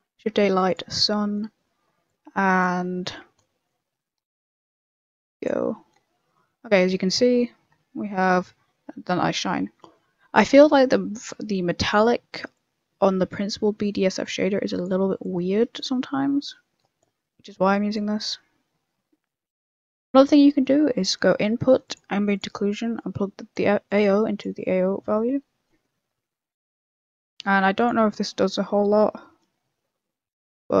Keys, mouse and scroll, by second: 0.9-2.0 scroll down 8, 2.0 click, 2.7 scroll up 6, 3.0 middle click, 3.2 scroll down 1, 3.3 scroll up 2, 3.4 middle click, 3.8 scroll down 4, 4.0 middle click, 4.7 click, 5.6-6.0 scroll up 4, 5.6 middle click, 6.1 middle click, 6.4 middle click, 6.7 middle click, 9.9 middle click, 11.2 right click, 11.3 middle click, 12.5 click, 15.2 click, 20.0 middle click, 20.5 shift+a, 22.9 click, 23.9 click, 26.1 middle click, 26.6 middle click, 27.8 click, 28.0 m, 28.6 middle click, 29.3 m, 29.9 m, 30.7 m.